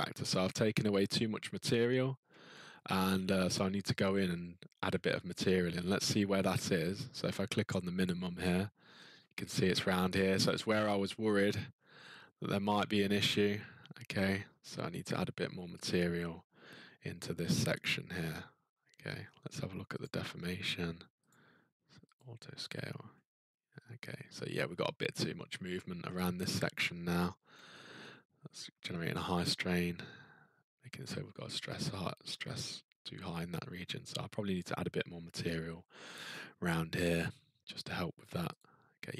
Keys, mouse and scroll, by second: 0.2-0.8 scroll, 2.0 middle click, 3.0-4.2 scroll, 4.2-6.9 scroll, 7.0-8.0 scroll, 8.0 click, 8.2-8.9 scroll, 8.9-9.8 scroll, 11.3 ctrl+middle click, 19.1 middle click, 20.0 click, 21.3 click, 22.2 click, 24.3 middle click, 25.3 middle click, 26.0 ctrl+middle click, 27.0 middle click, 27.2-27.7 scroll, 28.0-29.2 ctrl+scroll, 33.5 middle click, 34.0 middle click, 38.6 click.